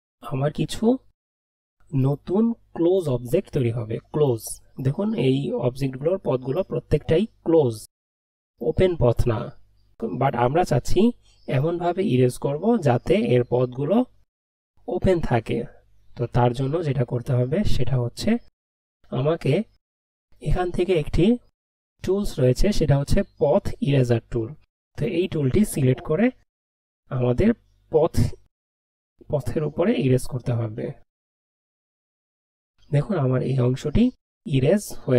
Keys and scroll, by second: 14.9 ctrl+z.